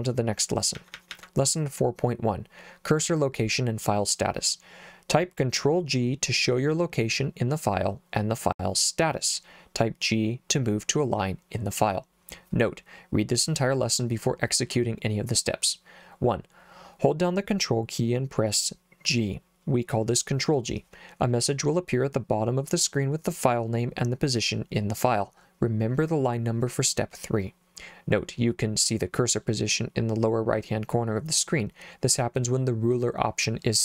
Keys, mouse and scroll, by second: 0.8 j, 1.0 j, 1.1 j.